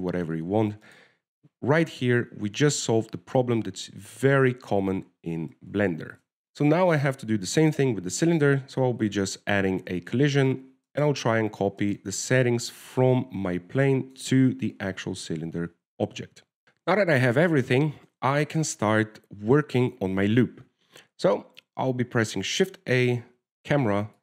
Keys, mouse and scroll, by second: 0.1 middle click, 0.6 shift+middle click, 1.3 middle click, 2.2 right click, 5.0-5.3 scroll down 2, 6.4 right click, 6.5 shift+middle click, 6.8 right click, 7.3 right click, 7.7 right click, 10.3 click, 12.2 right click, 13.1 right click, 14.0 click, 15.9 click, 23.8 shift+a.